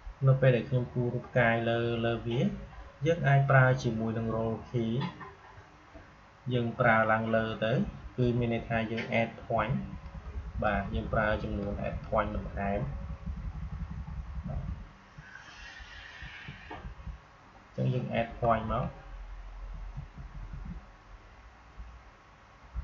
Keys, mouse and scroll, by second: 7.3 Up, 15.5 Right, 16.6 Down, 19.5-21.0 typing, 21.8 Down.